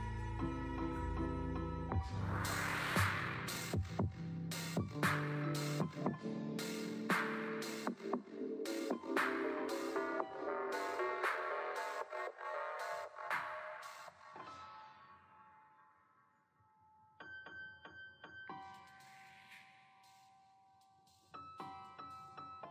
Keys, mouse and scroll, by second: 0.6 click, 3.3-3.9 scroll up 1, 3.9-4.4 drag, 3.9 shift+middle click, 4.4-4.9 scroll up 1, 5.3-6.2 scroll up 2, 5.5 click, 5.5 shift+middle click, 6.2 alt+z, 6.7 alt+z, 7.0 Tab, 7.2 click, 7.5 Tab, 7.9 alt+z, 8.6 3, 9.3-9.8 drag, 9.3 shift+middle click, 10.7 KP_3, 11.1 shift+middle click, 11.3-11.7 scroll up 4, 11.7 click, 13.7 click, 14.0 scroll down 3, 14.2 middle click, 14.9 click, 15.3 click, 15.6 click, 15.8 middle click, 16.0-16.4 scroll up 2, 16.4-17.6 shift+middle drag, 17.6 click, 18.0-19.4 middle drag, 21.4 Tab, 21.7 click, 21.9 Tab.